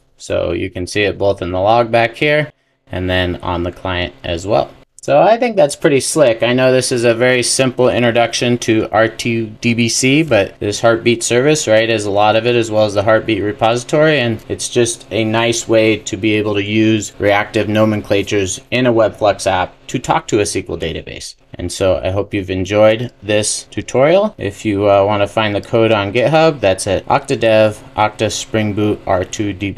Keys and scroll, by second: 9.5 super+e.